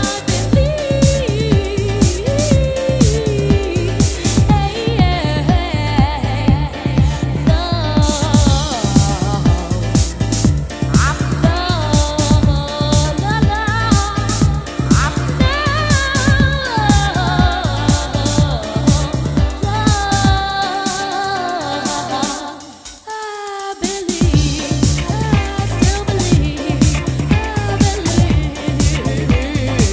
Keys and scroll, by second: 10.7 super+Tab, 16.1 Escape, 21.9 Right, 22.1 Left, 24.2 Left.